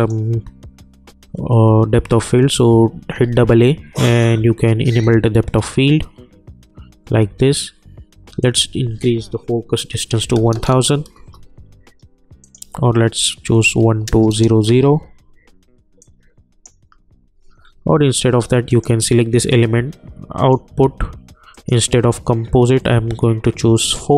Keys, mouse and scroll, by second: 3.0 a, 3.2 a, 5.0 click, 8.4 click, 11.1 Return, 12.4 click, 14.7 Return, 16.0-17.6 drag, 17.6 scroll up 1, 17.8-18.7 scroll down 1, 18.7 click.